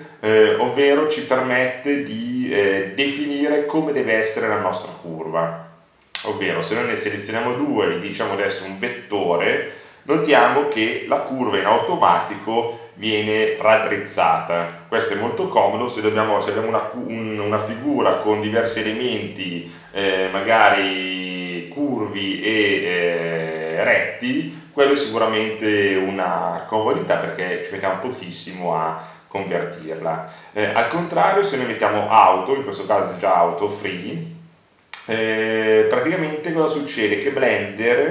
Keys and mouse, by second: 4.0-5.1 drag, 11.6-17.6 right drag, 18.2 ctrl+z.